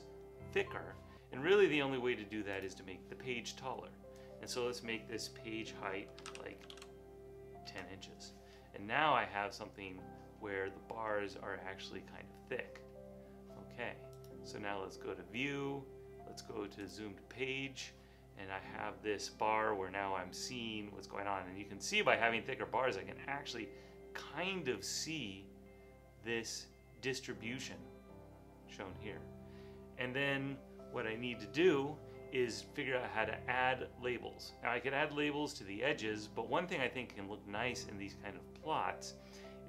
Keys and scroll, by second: 6.1-7.3 typing, 7.7 Return.